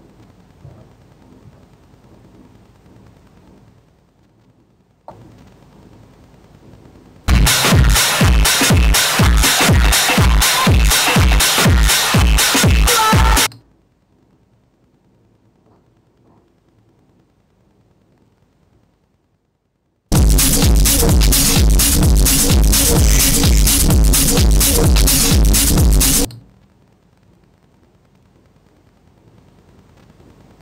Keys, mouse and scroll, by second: 0.0 Return.